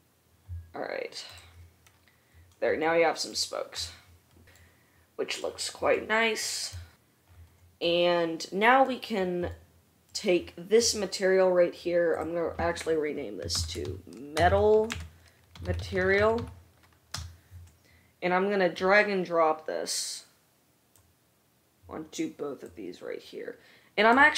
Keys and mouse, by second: 1.7 middle drag, 1.8-11.0 right drag, 11.0 middle click, 11.3-12.3 right drag, 12.3-21.3 middle drag, 21.3-22.8 right drag, 22.8-24.3 middle drag.